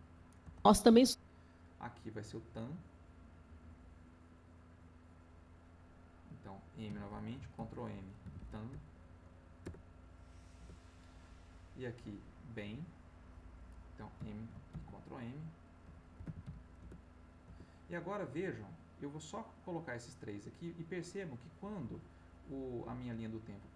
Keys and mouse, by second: 0.4 space, 2.2-5.2 drag, 6.8 m, 7.3 ctrl+m, 7.5 ctrl+m, 8.2 a, 8.4 m, 9.6 Return, 10.6 Return, 12.2 click, 14.1 m, 15.8 b, 16.2 e, 16.4 m, 16.8 Return, 17.4 Return, 19.1-23.7 drag.